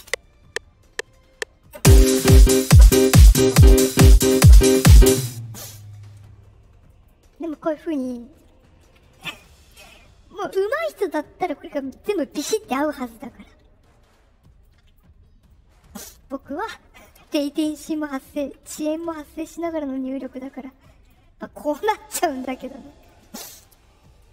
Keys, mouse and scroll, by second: 5.0 space, 6.8 right click, 11.7 click, 12.6 middle click, 14.6 click, 15.2 middle click, 17.6 ctrl+click, 18.9 click, 20.2 click, 21.8 click, 23.0 shift+click, 24.1 right click.